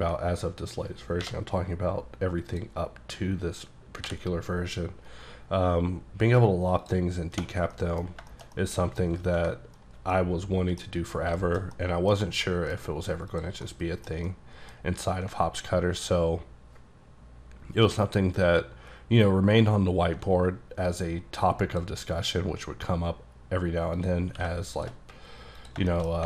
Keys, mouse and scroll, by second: 0.1 ctrl+click, 4.1 b, 5.0-6.9 scroll up 5, 6.9 click, 7.5 scroll down 2, 7.8 middle click, 8.1-8.6 scroll down 4, 8.4 shift+middle click, 8.6 middle click, 9.3 alt+a, 10.2 middle click, 10.9-11.4 scroll down 2, 11.4 shift+middle click, 12.1 middle click, 12.5 middle click, 12.9-13.4 scroll up 1, 13.4 click, 13.7 middle click, 14.3 middle click, 14.8 scroll up 2, 15.5-16.2 alt+scroll down 2, 16.2-16.7 alt+scroll up 1, 16.7-17.6 alt+scroll down 3, 17.6-19.4 alt+scroll up 7, 19.4-19.8 alt+scroll up 1, 20.9 click, 22.3 click, 24.3 q, 24.8 shift+click, 25.1-25.6 scroll down 2, 25.6 click, 25.8 shift+click, 26.0 shift+middle click.